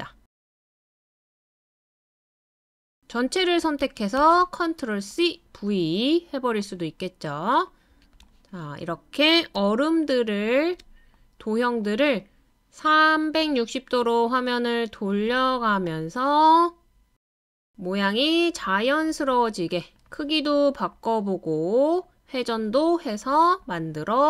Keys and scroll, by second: 3.8 super+c, 4.2 super+v.